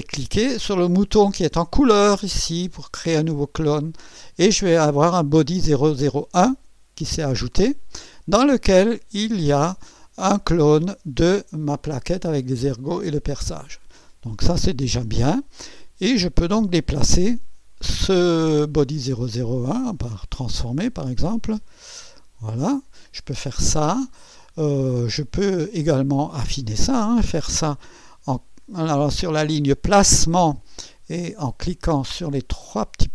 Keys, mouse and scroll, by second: 3.6 click, 9.1 click, 11.1 click, 16.5 click, 18.9 right click, 19.9 click, 21.2-22.9 drag, 25.4 click, 31.3 click.